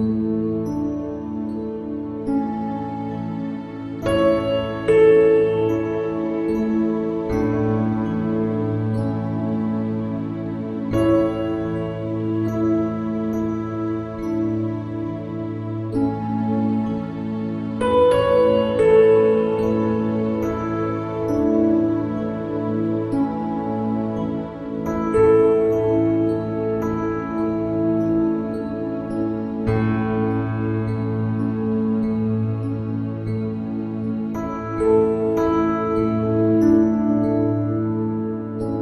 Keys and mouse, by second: 35.3 click.